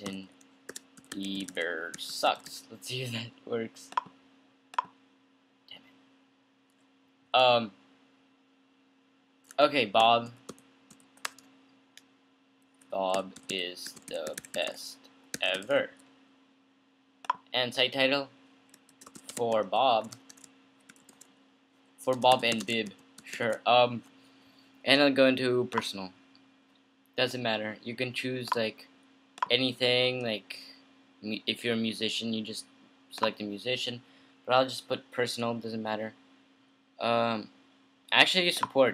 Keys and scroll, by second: 0.0-3.2 typing, 7.6-11.6 typing, 13.3-16.3 typing, 18.9-26.6 typing.